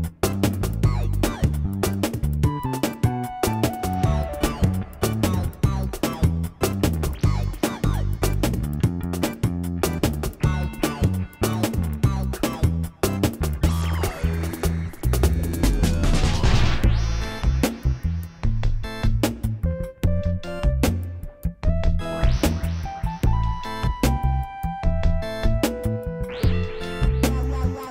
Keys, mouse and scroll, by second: 1.1 r, 1.7 r, 2.4 g, 3.1 click, 4.1 s, 5.9 click, 5.9 s, 6.1 KP_1, 6.5 g, 6.9 click, 7.4 click, 7.7 click, 8.5 s, 9.0 click, 9.7 s, 10.5 shift+s, 11.3 click, 11.6 s, 12.3 click, 12.9 middle click, 13.7 g, 14.2 click, 14.3 middle click, 14.5 s, 15.1 middle click, 15.5 click, 16.0 middle click, 16.2 middle click, 20.0 q, 23.0 click, 24.9 ctrl+s, 24.9 click.